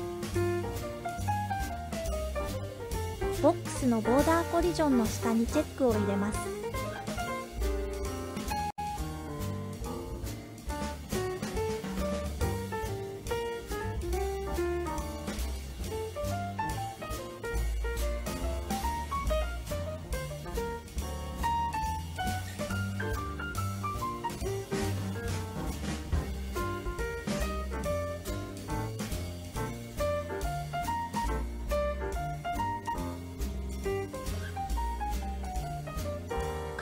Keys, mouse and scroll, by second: 2.6 scroll down 1, 3.2-3.7 scroll down 2, 6.2 click, 6.2 scroll down 2, 8.8-10.7 drag, 12.0 space, 22.6 space, 25.3 click, 26.4 click, 28.0-29.8 drag, 30.4 click, 31.4 click, 35.3-36.6 scroll down 1.